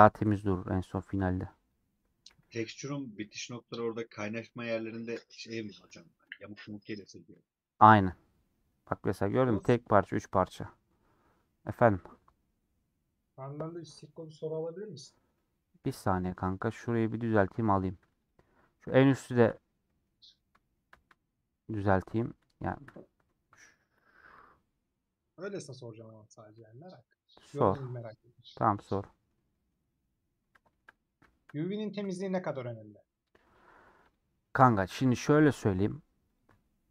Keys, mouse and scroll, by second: 0.2-1.3 scroll down 1, 1.7 alt+click, 2.3 ctrl+z, 2.5-2.9 scroll up 2, 4.2 alt+click, 4.7 scroll down 2, 5.1 a, 15.4 middle click, 15.8 scroll up 2, 16.1-17.2 middle drag, 17.2-17.8 scroll up 1, 18.3 alt+click, 18.8 scroll down 1, 19.1 shift+middle click, 19.5 scroll down 3, 19.8-25.7 middle drag, 25.7-26.2 scroll down 2, 26.2-27.3 scroll up 1, 27.3-27.7 scroll up 1, 27.7 alt+shift+click, 28.2 middle click, 28.8 scroll down 2, 29.0-30.2 middle drag, 30.2 scroll up 3, 30.5 shift+middle click, 31.4 scroll up 1, 32.4 alt+click, 32.8-34.1 middle drag, 34.1 click, 34.2 middle click, 34.8 scroll up 1, 35.0 middle click, 35.4-36.4 scroll up 1, 36.4 ctrl+click.